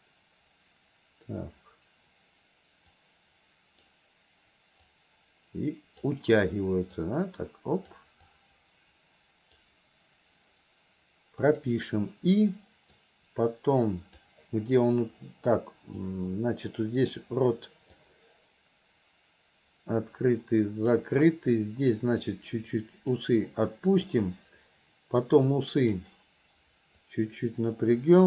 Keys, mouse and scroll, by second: 3.0 click, 4.9-6.1 drag, 7.1 click, 8.3-9.7 drag, 11.5 click, 13.1-14.4 drag, 16.1 click, 18.1-21.1 drag, 22.3 click, 24.0 click, 25.4-26.2 drag, 27.0-28.2 drag.